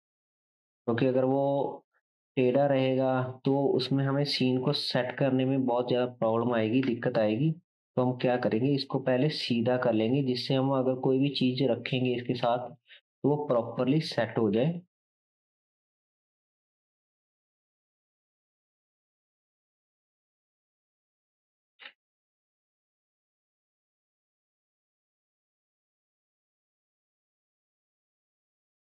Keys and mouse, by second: 4.4 r, 6.8 KP_1, 8.2 r, 14.3 r, 16.6 KP_3, 18.4 r, 21.8 KP_7, 25.3 r, 28.5 KP_3.